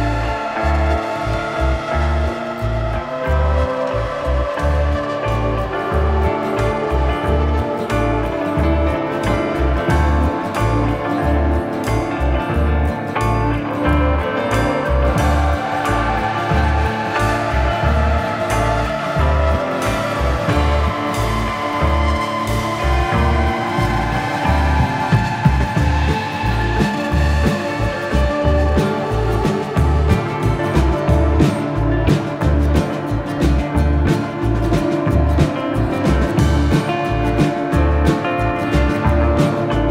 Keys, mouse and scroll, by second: 1.4 g, 1.6 click, 2.5 r, 3.2 click, 3.4 scroll up 1, 4.2 click, 4.5 click, 4.7 shift+middle click, 5.5 r, 6.2 click, 6.4 g, 6.8 click, 7.0 r, 7.1 click, 7.2 g, 7.4 click, 7.8-8.2 scroll down 1, 8.7 click, 9.3 click, 9.9 click, 10.2 shift+d, 11.0 click, 11.1 g, 11.2 click, 11.7 middle click, 11.9 r, 12.3 click, 12.9 middle click, 13.4 g, 13.5 middle click, 14.1 click, 14.7 middle click, 15.0 click, 15.0 r, 15.3 middle click, 16.3 middle click, 16.6 r, 17.0 click, 17.6 middle click, 18.3 middle click, 19.0 right click, 19.2 click, 19.8 middle click, 20.0 z, 20.7 z, 21.1 shift+middle click, 22.2 shift+middle click, 22.3 click, 24.8 middle click, 26.2 middle click, 27.6 shift+middle click, 29.3 click, 29.8 r, 31.1 click, 31.9 click, 32.3 right click, 33.0 click, 33.6 r, 34.0 z, 35.8 click, 36.6 g, 36.7 click, 37.6 middle click, 38.3 ctrl+middle click, 39.2 middle click, 39.4 shift+middle click.